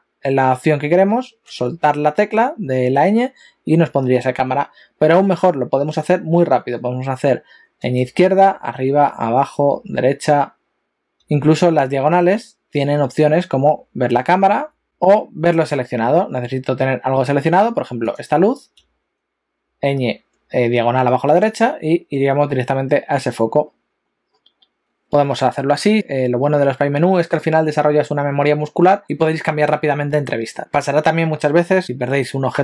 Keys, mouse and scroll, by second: 14.8 click, 18.0 click, 23.8-24.5 scroll down 8.